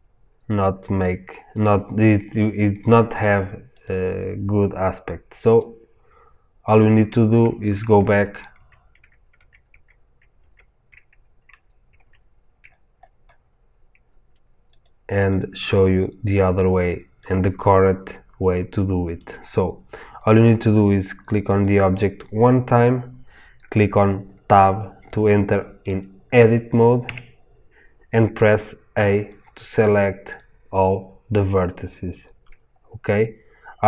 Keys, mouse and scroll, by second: 6.8-7.9 drag, 7.9 ctrl+z, 11.4 scroll up 1, 11.9 ctrl+z, 12.6 scroll up 1, 14.8 click, 27.0 Tab, 28.9 a, 32.2-32.6 scroll down 1, 32.6-33.8 scroll up 1.